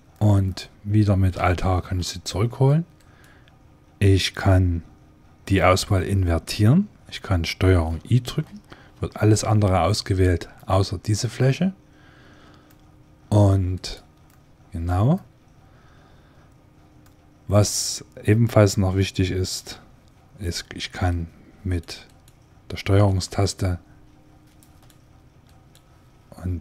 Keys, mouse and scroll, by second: 0.0-1.9 middle drag, 1.5 alt+h, 2.8-5.0 right drag, 8.3 ctrl+i, 9.7-10.8 drag, 11.3 click, 12.0 click, 12.5-13.6 middle drag, 13.6-15.4 drag, 13.6-15.2 right drag, 15.4 middle click, 16.9-18.5 drag, 18.5 middle click, 20.9-22.7 right drag, 23.1 right click, 23.6 ctrl+click, 23.8 ctrl+right click.